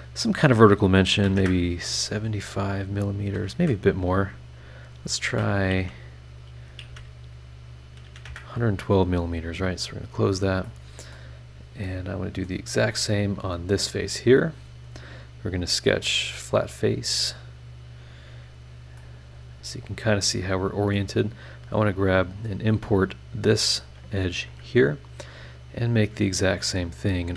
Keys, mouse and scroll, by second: 1.1 KP_7, 1.2 KP_5, 1.4 KP_Enter, 2.0-2.5 scroll down 2, 2.6 scroll up 2, 3.5 Escape, 4.2 click, 4.8 click, 5.7 KP_1, 6.8 KP_1, 8.1 KP_2, 8.3 KP_Enter, 9.8 click, 10.6 middle click, 10.7 click, 10.7 right click, 11.3 scroll down 1, 11.8 click, 11.9 right click, 12.9 click, 13.3 scroll up 1, 14.8 click, 16.0 click, 16.8 scroll down 1, 17.8 scroll up 1, 18.4 scroll up 1, 18.9 scroll up 1, 19.0-21.1 middle drag, 19.0-21.1 drag, 22.9 click, 23.8 click, 24.5 Escape, 25.2 click, 26.8 click.